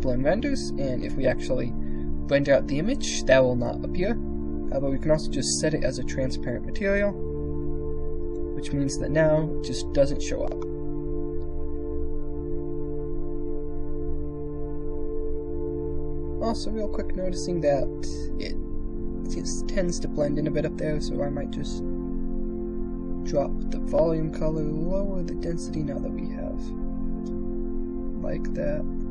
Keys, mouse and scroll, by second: 5.1 click, 7.9 click, 10.3 click, 12.5 KP_0, 18.1 click, 20.5-21.5 drag, 24.3-29.1 drag.